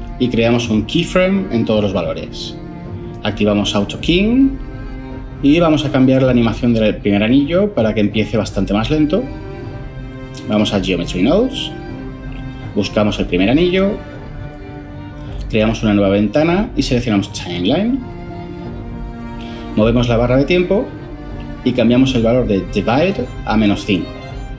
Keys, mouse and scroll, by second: 23.2-23.6 typing.